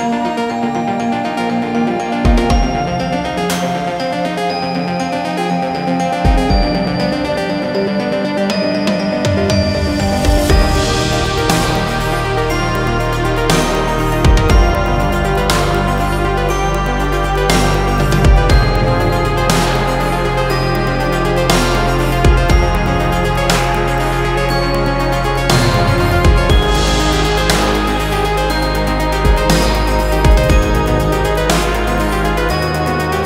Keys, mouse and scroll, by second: 1.2 click, 16.3 click, 21.4 ctrl+middle click, 21.4 click, 22.5 click, 25.8 ctrl+middle click, 27.1 shift+middle click, 27.7 ctrl+middle click, 28.6 shift+middle click, 29.1 ctrl+middle click, 30.2 ctrl+middle click, 30.7 ctrl+middle click, 32.8 click.